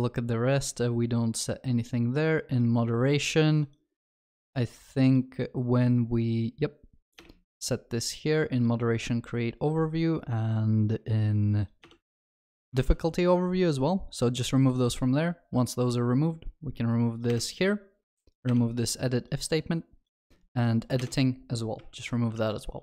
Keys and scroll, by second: 12.8 ctrl+s, 21.9 ctrl+alt+shift+l, 22.4 ctrl+s.